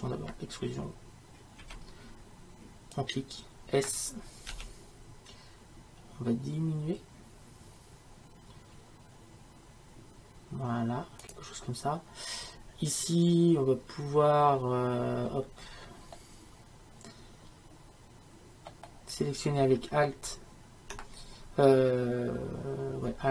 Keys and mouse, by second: 1.6 e, 15.3-23.3 middle drag.